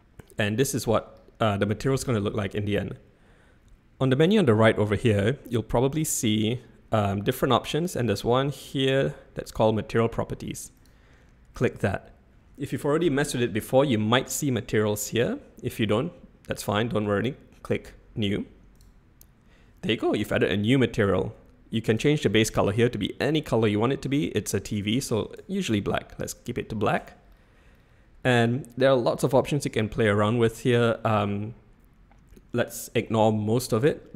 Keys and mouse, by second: 10.8 click, 18.7 click, 21.9 click.